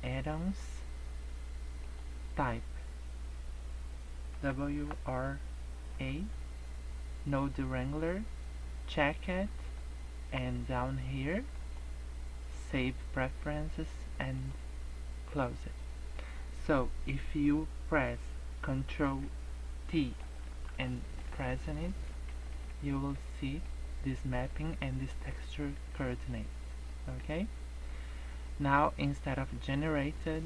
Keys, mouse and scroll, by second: 20.2 ctrl+t, 20.4 ctrl+click, 20.8 ctrl+t, 21.4-22.3 scroll down 13, 22.3 shift+middle click, 22.7-23.2 scroll up 6, 23.2 shift+middle click, 23.7 scroll up 2, 25.8 middle click, 26.5 scroll up 2, 26.9 middle click, 29.6 click.